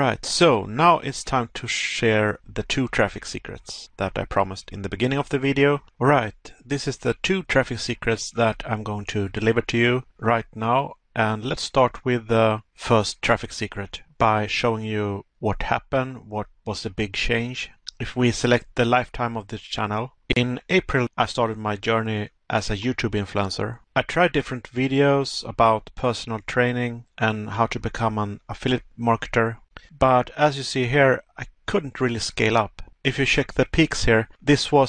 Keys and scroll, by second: 4.6 Pause, 10.9 Pause, 12.3 Pause, 16.2 Pause, 18.4 Pause, 19.8 Pause, 25.1 Pause, 27.6 Pause, 33.9 Pause.